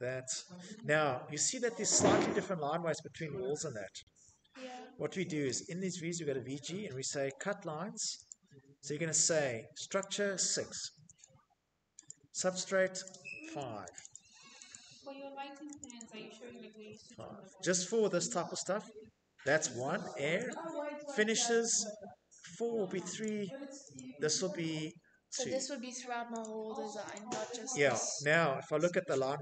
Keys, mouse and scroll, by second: 1.9 Escape, 2.4 middle click, 3.5-4.4 typing, 5.7 click, 6.0 g, 6.7 click, 8.4 click, 9.2 typing, 9.5 Return, 12.6 Return, 15.3 Return, 18.0 Return, 23.7 Return.